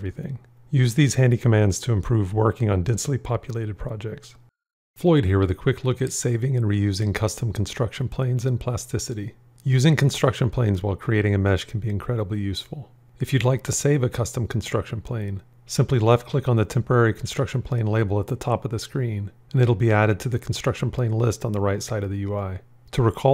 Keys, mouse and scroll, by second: 11.2 shift+space.